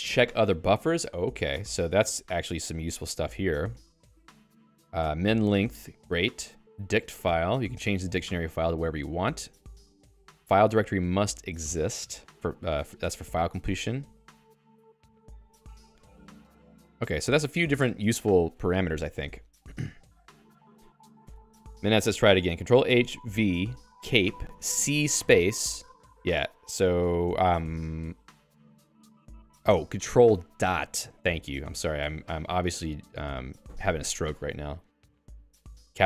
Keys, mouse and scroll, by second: 0.8 Down, 1.3 Up, 1.5 Tab, 2.0 Up, 2.2 Up, 2.3 Up, 2.9 Return, 4.6 Down, 4.8 Down, 5.1 Down, 5.3 Down, 7.7 Return, 9.5 Return, 9.6 Down, 9.7 Down, 10.2 Down, 10.5 Return, 13.1 Return, 13.5 Down, 13.8 Down, 14.0 Down, 14.3 Down, 14.5 Down, 14.7-15.6 Down, 15.8 Down, 16.0 Down, 16.7 Down, 16.9 Down, 17.2-18.2 Up, 20.2 q, 21.2 Escape, 21.4 Escape, 23.8-25.7 typing, 29.1 ., 29.7 BackSpace, 31.4 BackSpace, 33.2 Delete, 34.2 Delete.